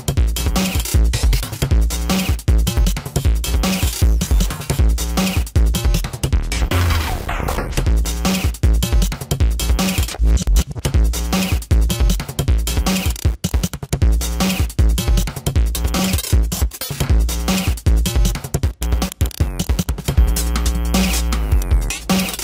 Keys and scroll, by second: 1.7 space, 6.1 space, 11.2 ctrl+alt+z, 16.2 space.